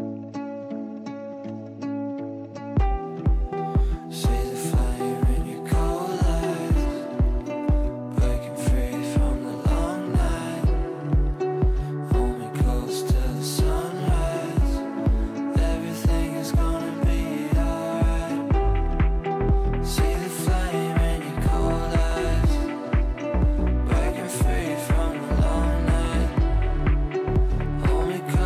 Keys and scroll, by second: 28.2 shift+F2.